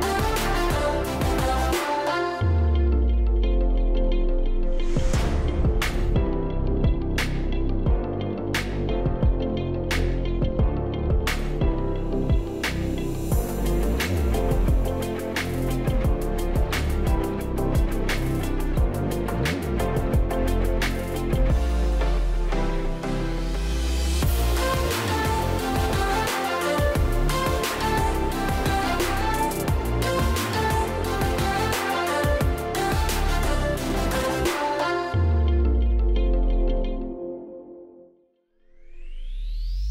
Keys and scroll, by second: 6.9 space, 13.9 shift+Down, 23.1-24.8 typing, 24.9 Return, 35.5 space.